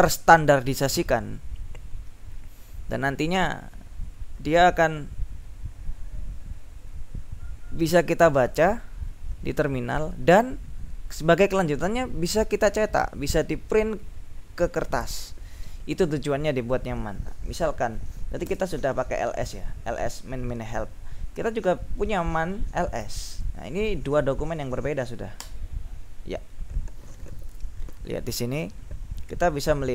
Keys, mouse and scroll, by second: 18.6 space, 22.8-23.7 typing, 25.6 Return.